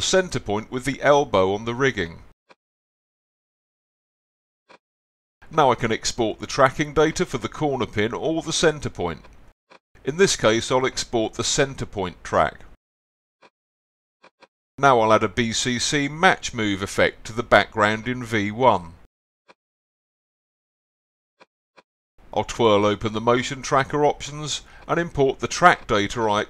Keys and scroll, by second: 1.9 z, 11.6-12.9 typing.